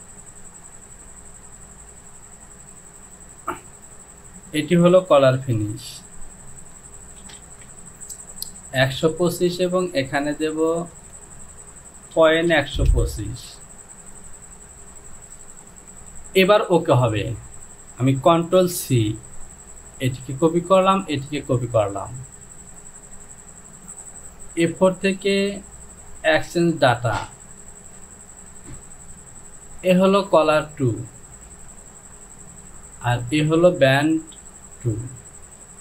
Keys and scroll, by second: 7.3 shift+f, 7.5 shift+f, 7.9 Down, 11.2 Down, 12.2 KP_Decimal, 12.5 KP_1, 12.8 KP_2, 13.1 KP_5, 13.3 Down, 18.4 ctrl+c.